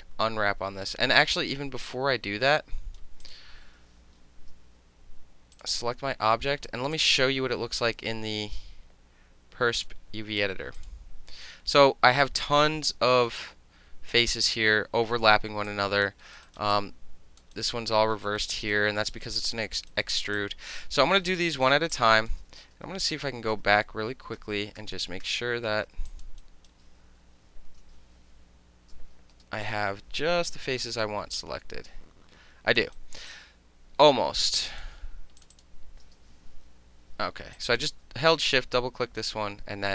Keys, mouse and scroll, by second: 2.6-3.0 right drag, 3.2 click, 4.2 shift+i, 5.5 click, 6.9 click, 9.7 click, 10.8 click, 13.1 alt+right click, 13.4 alt+click, 15.7 alt+click, 16.0 alt+middle click, 16.3 alt+middle click, 16.4 alt+right click, 16.6 alt+middle click, 16.7 alt+click, 17.4 alt+middle click, 17.5 alt+right click, 17.6 alt+middle click, 18.4 alt+middle click, 18.5 alt+right click, 18.7 alt+middle click, 19.1 alt+middle click, 19.2 alt+right click, 19.4 alt+middle click, 19.9 alt+right click, 20.2 alt+middle click, 20.3 alt+click, 20.8 alt+middle click, 21.1 alt+middle click, 21.3 alt+click, 21.4 alt+middle click, 21.6 alt+middle click, 21.9 alt+click, 22.3 ctrl+alt+middle drag, 22.5 ctrl+z, 22.7 ctrl+z, 23.1 ctrl+z, 23.5 ctrl+z, 24.3 ctrl+z, 24.8 ctrl+z, 25.2 ctrl+z, 26.1 alt+click, 26.4 alt+right click, 27.2 f, 29.3 space, 30.5 shift+i, 31.3-32.8 alt+drag, 32.8 middle click, 32.9 right click, 33.2 middle click, 33.3-34.8 drag, 35.4 shift+click, 35.5 shift+click, 36.6 shift+i, 37.5 alt+click.